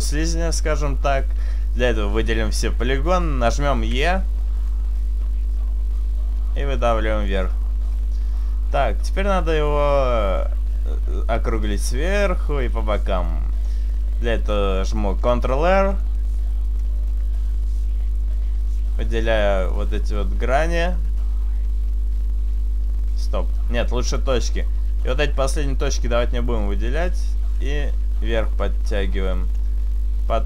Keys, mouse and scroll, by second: 4.0 e, 4.2 right click, 4.7 click, 13.4 middle click, 15.2 ctrl+r, 16.4 right click, 17.2 right click, 17.4 shift+right click, 17.7 shift+right click, 18.7 shift+right click, 19.7 shift+right click, 21.2 shift+right click, 24.1 click, 25.1 shift+right click, 26.0 shift+right click, 27.7 click.